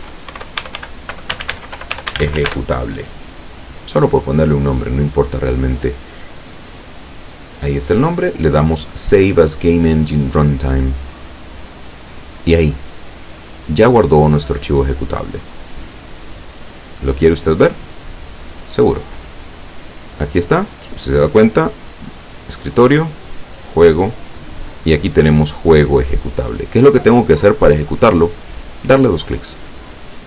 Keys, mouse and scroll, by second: 0.4-2.5 typing, 6.5 click, 10.7 click, 18.1 click, 22.4 click, 23.6 click, 29.9 click.